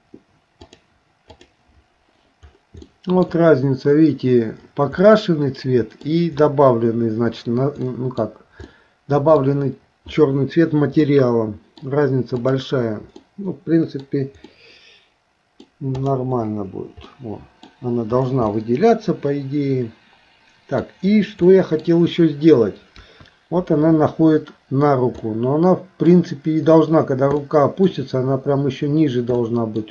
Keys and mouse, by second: 0.7 click, 1.4 click, 2.9 shift+middle click, 5.0-6.1 middle drag, 7.9 middle click, 8.7 middle click, 11.0 middle click, 12.4 click, 13.3 middle click, 14.5-15.7 middle drag, 16.0 click, 17.1 middle click, 18.5-20.8 middle drag, 21.5 middle click, 23.0 KP_1, 25.3 middle click, 27.5 middle click, 29.4 middle click.